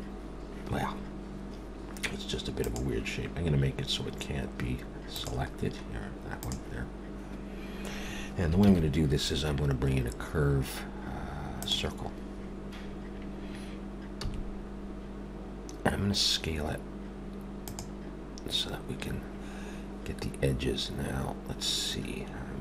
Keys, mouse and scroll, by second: 2.6 click, 5.1 click, 5.6-6.4 scroll down 1, 6.4 click, 8.6 shift+a, 14.2 s.